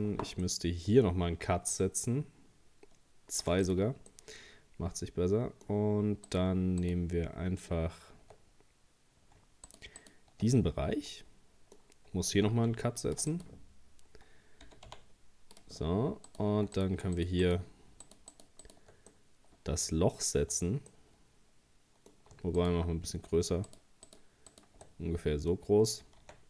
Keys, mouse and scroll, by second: 1.7 ctrl+r, 4.1-6.3 middle drag, 6.3 right click, 6.8 shift+right click, 9.7 shift+right click, 10.0 shift+right click, 10.6-12.7 middle drag, 12.7 ctrl+r, 14.7 g, 16.3 right click, 16.8 right click, 17.2 shift+right click, 17.4 shift+right click, 18.1 shift+right click, 18.3 shift+right click, 18.6 shift+right click, 19.1-22.6 middle drag, 22.6 shift+right click, 23.7 shift+right click, 24.1 shift+right click, 24.5 shift+right click, 24.9-26.2 middle drag, 26.2 e.